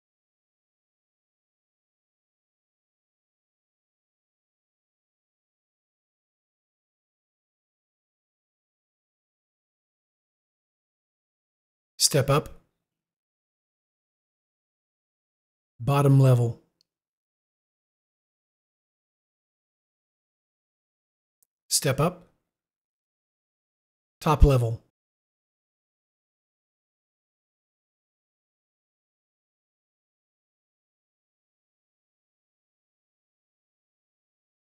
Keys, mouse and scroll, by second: 13.3 u, 17.3 u, 22.9 u.